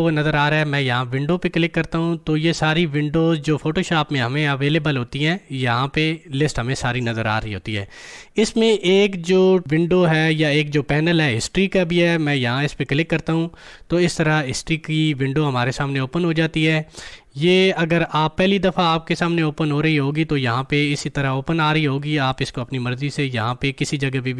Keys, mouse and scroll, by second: 3.3 click, 12.8 click, 20.1-24.3 drag.